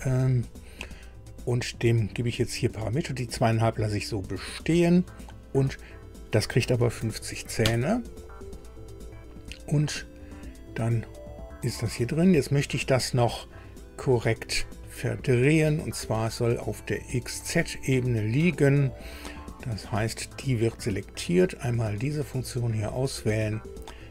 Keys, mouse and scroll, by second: 2.0 click, 6.8 KP_5, 7.0 KP_0, 7.6 KP_Enter, 10.7-11.0 scroll down 2, 15.1 click, 15.6 scroll down 2, 17.0 click, 22.6 click, 23.8 click.